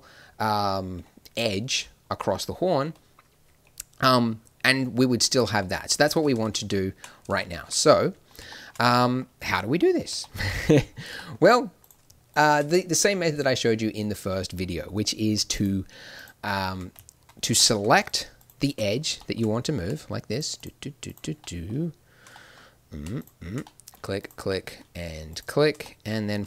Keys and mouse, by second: 6.2 ctrl+z, 6.4 ctrl+z, 6.6 ctrl+z, 11.8-15.5 right drag, 17.3 middle click, 17.5 click, 17.7-23.8 middle drag, 23.8-26.4 drag.